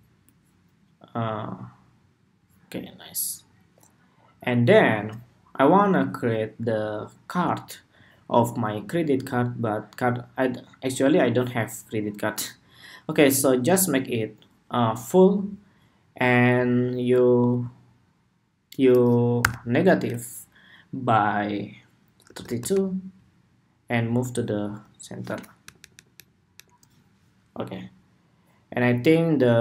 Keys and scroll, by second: 26.0 alt+Down, 26.3 alt+Down.